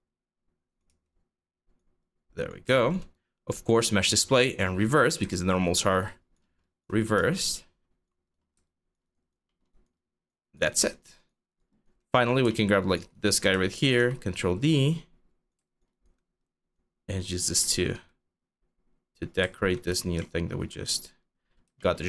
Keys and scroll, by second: 0.5 e, 2.3 alt+e, 6.8 e, 8.2 alt+e, 13.4 ctrl+d, 13.6 w, 19.5 e, 20.8 4.